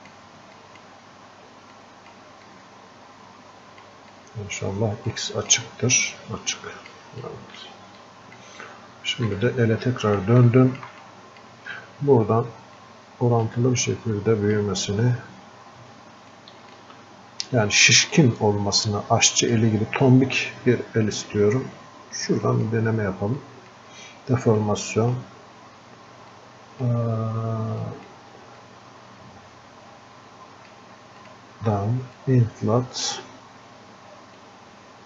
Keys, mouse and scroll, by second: 5.2-6.6 alt+drag, 6.6 click, 7.3-10.6 alt+drag, 10.6 alt+click, 11.1-12.9 drag, 12.9-16.4 drag, 16.7-35.0 shift+drag.